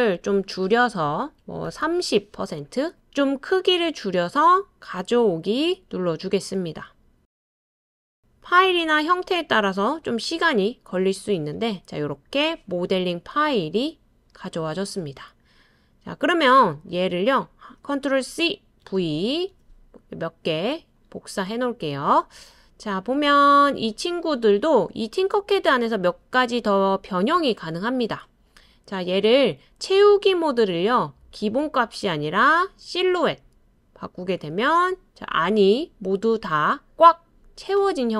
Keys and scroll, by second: 0.0-2.3 typing, 18.3 super+c, 18.8 super+v, 19.5 super+v.